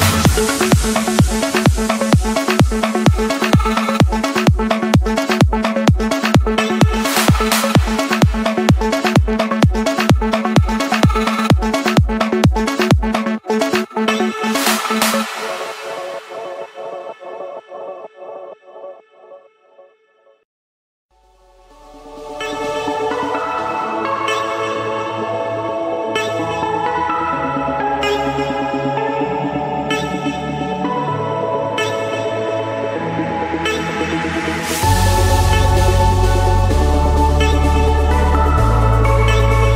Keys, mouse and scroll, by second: 2.5 click, 5.4 click, 6.9-8.0 scroll, 8.0-9.1 scroll, 9.1 scroll, 11.9 d, 12.2 Return, 13.5-15.2 typing, 17.5 Return, 19.3 click, 19.9 click, 22.1 typing, 24.3 Return, 25.0-26.1 drag, 28.7-30.4 typing, 31.7 Return, 33.4-34.5 middle drag, 35.3-36.4 drag.